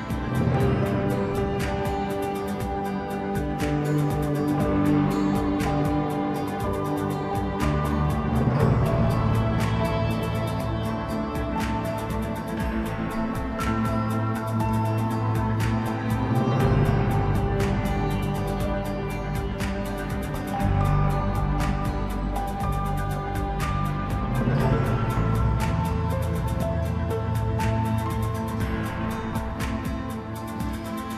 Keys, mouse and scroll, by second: 0.0-4.7 drag, 4.7 scroll down 2, 5.0-5.8 middle drag, 5.8 Tab, 6.3-7.6 middle drag, 7.6 drag, 8.3 click, 10.1 click, 10.5-11.7 middle drag, 11.7 click, 12.1 click, 12.4-14.3 middle drag, 14.3-15.4 drag, 15.4-17.7 middle drag, 17.7 shift+d, 19.6 r, 24.1 r, 26.3-26.6 scroll down 2, 26.6 middle click, 27.3-27.8 scroll up 1, 27.8 shift+click, 28.2 shift+click, 28.7 click, 30.1 ctrl+j.